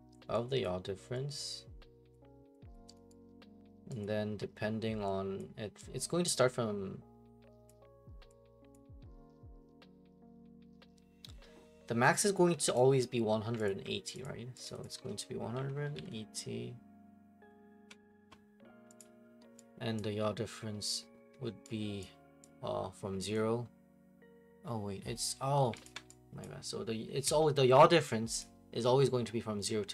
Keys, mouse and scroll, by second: 0.6 click, 2.1 click, 2.7 click, 3.1 right click, 4.0 alt+click, 5.4 click, 7.6 click, 8.7 click, 12.6 click, 12.7 alt+click, 13.7 alt+click, 14.2 click, 14.6 click, 14.8 click, 15.3-16.4 typing, 19.0 click, 20.0 click, 21.2 Delete, 22.0 click, 23.3 click, 25.7 click, 25.8 alt+click, 26.4 click, 27.1 Delete, 28.4 click.